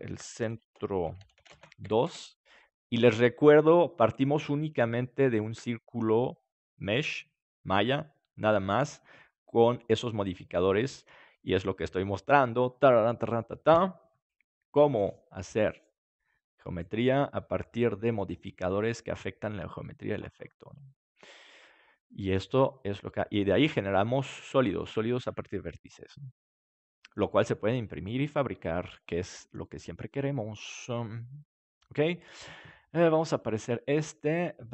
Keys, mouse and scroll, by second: 9.8-15.2 middle drag, 18.1-23.1 middle drag, 33.3-34.7 drag.